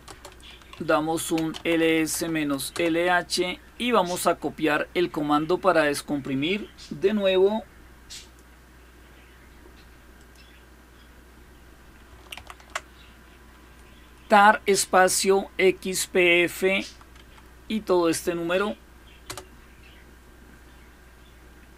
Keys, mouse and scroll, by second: 0.0-2.5 typing, 8.0 click, 10.0 click, 12.2 ctrl+v, 16.9 Right, 19.0 Return.